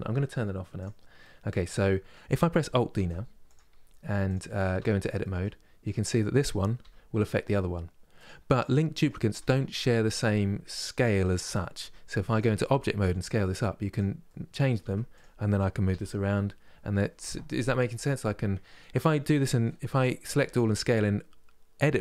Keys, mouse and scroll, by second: 0.4 click, 0.9-2.6 middle drag, 2.6 alt+d, 3.5 scroll up 2, 3.9 click, 4.4 Tab, 4.8 middle click, 5.5-6.5 drag, 6.5 g, 8.3-11.4 middle drag, 11.4 Tab, 12.0 click, 12.6 s, 13.9 middle click, 14.5 Tab, 14.8 click, 15.5 g, 18.6-19.9 middle drag, 19.9 a.